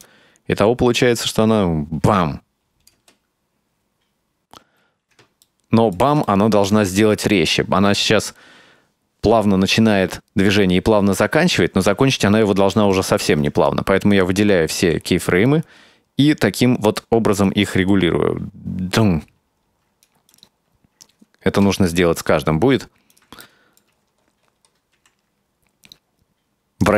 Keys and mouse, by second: 0.1-3.0 drag, 3.0 space, 4.7 space, 5.6 ctrl+middle click, 6.3 shift+middle click, 8.0-11.9 drag, 13.0 shift+middle click, 13.6 right click, 14.2 right click, 14.9 r, 17.5-20.1 drag, 20.3 right click, 21.7 KP_Decimal, 23.2 right click, 23.5 middle click, 25.0 r.